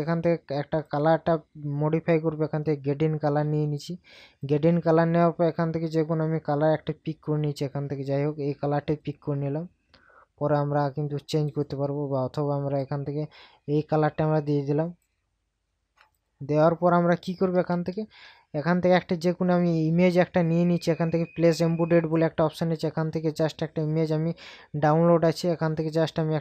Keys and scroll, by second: 17.8 ctrl+KP_Add.